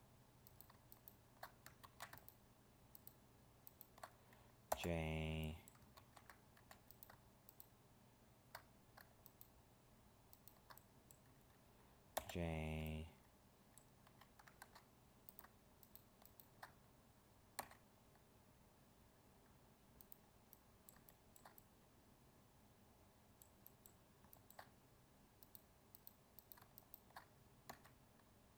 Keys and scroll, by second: 1.8 ctrl+z, 6.0 ctrl+z, 14.6 ctrl+Tab.